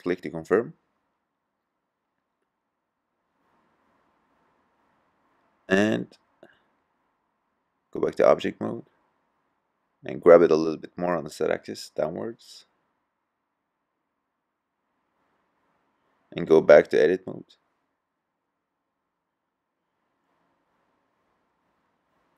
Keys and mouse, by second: 4.0-5.0 drag, 8.6 g, 14.7-16.4 middle drag, 16.4 click.